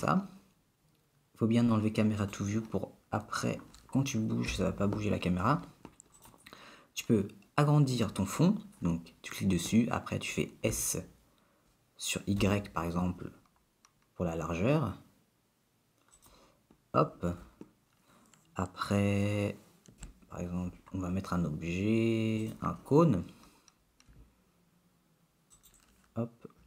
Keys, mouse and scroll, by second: 2.2 click, 4.5 n, 6.2 click, 10.8 s, 20.0 shift+a, 24.1 s.